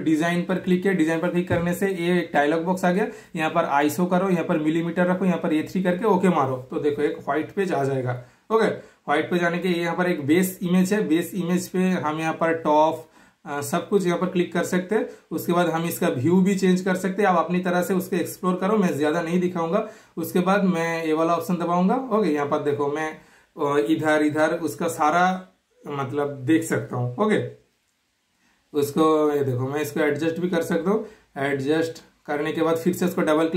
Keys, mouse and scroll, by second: 0.8 super+click, 7.1 typing, 9.8 super+scroll up 1, 10.7 super+scroll down 1, 10.9 super+click, 13.2 super+scroll up 1, 13.3 super+scroll down 1, 15.0 super+scroll down 1, 15.6-16.3 super+scroll up 1, 16.3-17.9 typing, 17.1 super+click, 17.5 super+scroll up 1, 17.7 super+scroll down 1, 18.3 super+scroll up 1, 20.4 super+click, 24.5 super+click, 27.8 click, 28.0 typing, 29.3 super+Delete, 29.7 super+click, 32.7 super+click.